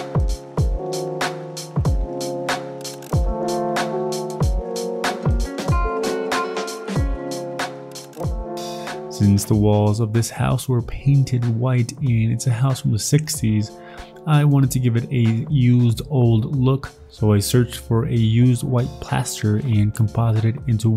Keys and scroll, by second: 0.5 ctrl+z, 0.9-5.7 typing, 2.1 ctrl+z, 6.6 ctrl+z, 8.6 alt+Tab, 9.0 alt+Tab, 14.2 alt+Tab, 14.5 Escape, 14.5 alt+Tab, 15.2 alt+Tab, 15.8 ctrl+t, 16.3 ctrl+t, 16.7 s, 17.1 v, 17.2 ctrl+z, 17.5 ctrl+t, 18.0 ctrl+z, 18.0 ctrl+z, 18.5 Delete, 18.5 ctrl+t, 18.8 ctrl+t, 20.7 ctrl+j.